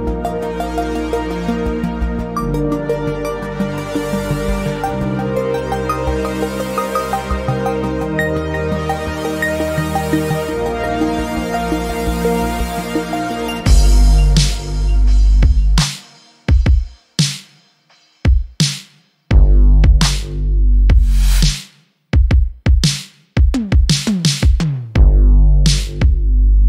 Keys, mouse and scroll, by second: 0.1-2.5 drag, 5.4-7.8 drag, 8.5-12.5 middle drag, 13.2 click, 14.6 KP_1, 15.5 r, 17.7 ctrl+z, 18.3 r, 20.7 Tab, 22.1 alt+z, 23.8 click, 25.4 x.